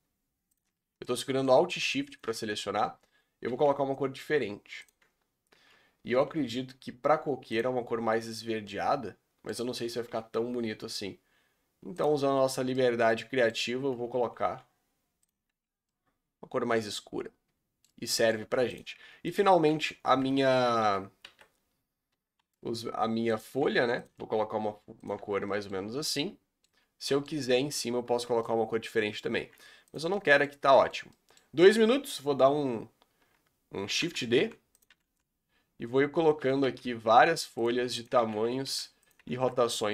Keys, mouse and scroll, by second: 0.5 alt+shift+click, 1.0-2.1 shift+middle drag, 2.1 alt+shift+click, 3.5 g, 5.0 Tab, 5.5 Tab, 6.1 g, 7.7 Tab, 8.1 scroll down 3, 8.6 middle click, 9.6 Tab, 10.1 g, 12.2 Tab, 12.5 scroll down 5, 12.7 middle click, 13.5 scroll up 4, 13.7 Tab, 14.4 g, 15.4 Tab, 15.9-18.4 middle drag, 18.4 Tab, 18.7 click, 18.9 Tab, 19.3 click, 20.2 Tab, 20.6 a, 21.2 a, 22.1 a, 22.4 5, 23.5 g, 24.2 s, 25.1 Tab, 25.6 middle drag, 25.8 scroll down 4, 26.0-26.6 middle drag, 26.6-27.0 scroll up 6, 27.0-27.9 middle drag, 27.9 Tab, 28.2 scroll down 1, 28.3 Tab, 28.4-29.0 middle drag, 29.0-29.3 scroll up 2, 29.3 r, 30.1-30.9 middle drag, 30.9 scroll down 2, 31.1-33.9 middle drag, 33.9 shift+d, 34.3 r, 34.9 r, 36.6 r, 37.7 s, 38.2 shift+d, 38.6 r, 39.1 r.